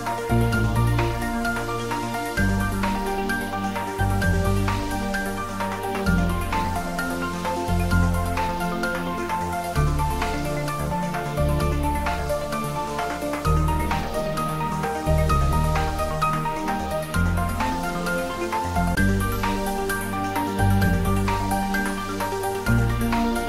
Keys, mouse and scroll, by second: 5.8 click, 6.6 Tab, 7.8 right click, 7.8 right click, 8.8 click, 9.7-11.6 middle drag, 12.1 Tab, 13.7 a, 15.2 ctrl+b, 17.4 click, 18.2 Tab, 20.0-20.4 scroll down 1, 20.4-21.7 middle drag, 21.8-22.8 scroll up 1, 22.8 right click.